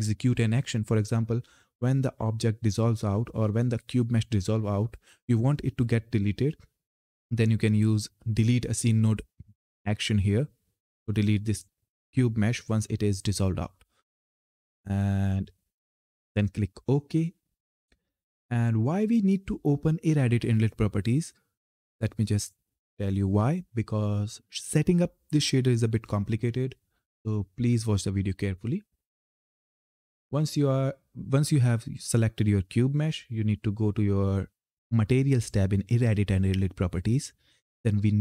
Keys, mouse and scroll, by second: 9.0 click, 11.3 click, 16.1-18.9 drag, 34.4 click.